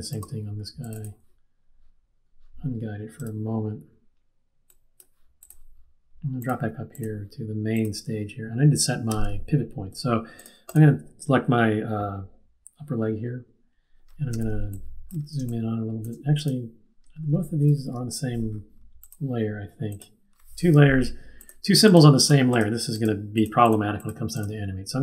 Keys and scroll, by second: 9.0 q, 14.3 z, 17.6 super+-.